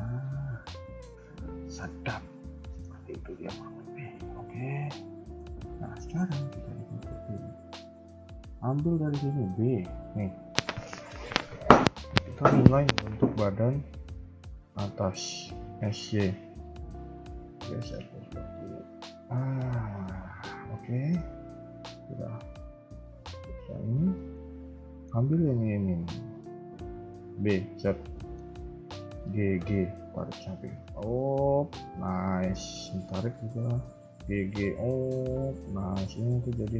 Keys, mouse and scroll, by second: 0.3-2.3 scroll down 11, 0.6 shift+middle click, 1.6 shift+middle click, 2.1 KP_1, 2.6 shift+middle click, 2.9 scroll up 3, 3.4 KP_3, 4.0 shift+middle click, 4.3 scroll up 2, 4.4 KP_1, 5.2 shift+middle click, 5.5 a, 6.1 a, 6.1 b, 7.7 scroll up 2, 7.8 a, 8.0 a, 8.2 b, 9.5 KP_3, 9.7-10.8 scroll down 2, 10.8 scroll down 1, 14.6 shift+middle click, 14.9-15.7 scroll up 1, 15.7 s, 19.4 KP_1, 19.7 scroll down 1, 20.3-20.8 scroll down 2, 20.9 shift+middle click, 21.3 a, 21.4 a, 21.7 b, 24.1 shift+middle click, 24.4 scroll up 1, 24.5 a, 24.6 a, 24.9-25.5 scroll up 2, 27.1 b, 28.1 shift+middle click, 29.2 g, 32.2 shift+middle click, 32.5 a, 32.7 a, 32.9 b, 34.0 g, 35.7 a, 36.1 a, 36.1 b.